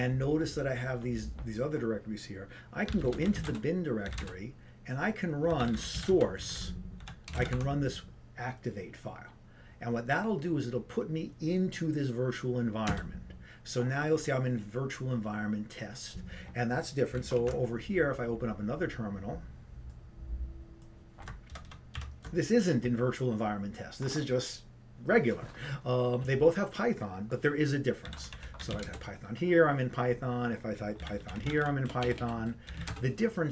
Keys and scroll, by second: 3.0-3.8 typing, 30.1 Return, 30.1 typing.